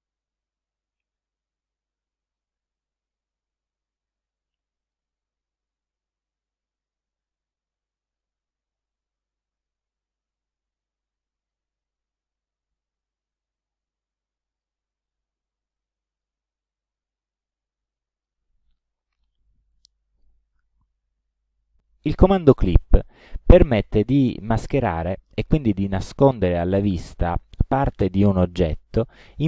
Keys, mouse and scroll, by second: 2.3 click, 3.8-5.2 drag, 6.9 shift+click, 8.1 click, 9.7-11.8 drag, 14.6 click, 15.7 space, 16.2 click, 17.5 click, 22.7 click, 29.3 click.